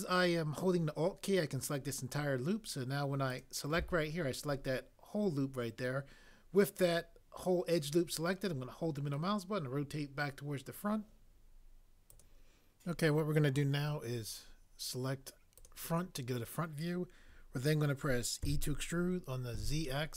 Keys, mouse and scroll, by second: 18.4 e, 19.5 z.